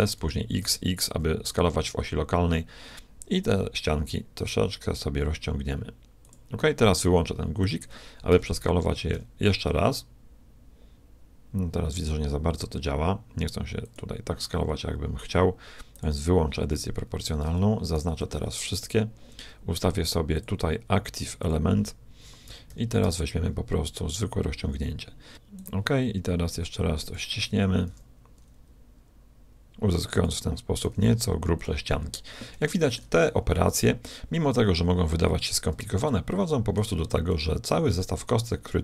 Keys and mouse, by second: 7.7-9.5 drag, 8.3 s, 16.1-17.9 drag, 17.5 a, 18.0 b, 20.3-22.2 drag, 22.5 s, 27.1-28.9 drag, 27.9 s, 30.9 s, 32.6-34.5 middle drag, 36.0-38.8 middle drag.